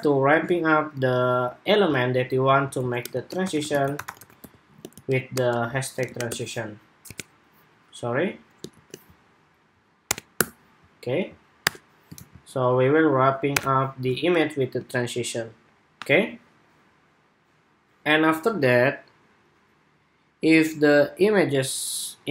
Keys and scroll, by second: 2.5 super+x, 11.9 super+v.